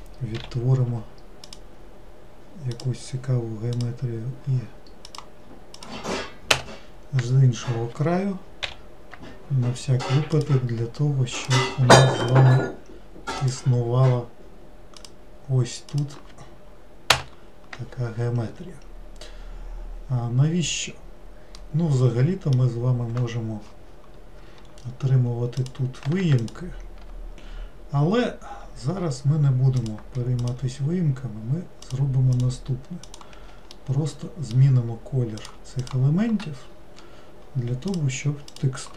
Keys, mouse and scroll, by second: 0.5 k, 21.7-24.7 middle drag, 24.8-25.7 scroll up 4, 25.7 click, 26.5 shift+click, 29.9 shift+click, 30.5 shift+click, 31.9 shift+click, 32.4 shift+click, 33.2 shift+click, 33.8-35.5 middle drag, 35.5 shift+click, 35.9 shift+click, 36.7 scroll down 2, 38.0 shift+click, 38.6 shift+click.